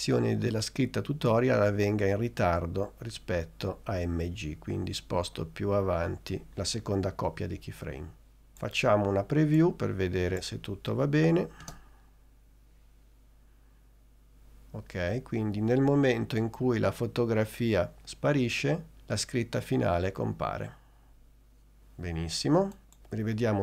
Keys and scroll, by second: 11.8 space.